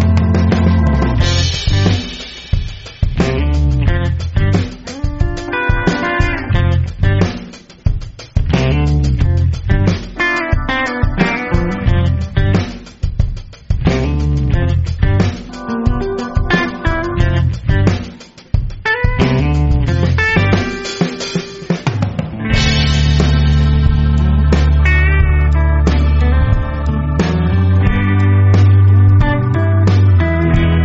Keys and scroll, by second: 7.3 space, 7.8 super+space, 7.9 super+space, 8.7 super+space, 8.8 super+space, 10.3 space, 10.8 alt+super+space, 10.8 alt+super+space, 11.3 alt+super+space, 11.8 alt+super+space, 12.3 alt+super+space, 12.4 alt+super+space, 13.4 typing, 14.5 alt+super+space, 14.7 typing, 14.8-15.3 alt+super+space, 16.0 space, 16.5 alt+super+space, 17.0 super+space, 18.2 space, 18.7 super+space, 18.9 super+space, 20.3 space, 20.9 alt+super+space, 20.9 alt+super+space, 21.0 alt+super+space, 22.2 super+space, 22.3-22.6 typing, 23.1 super+z, 24.7-26.5 typing, 26.6 super+space, 26.7 super+space, 27.3-28.0 super+space, 28.9 super+space.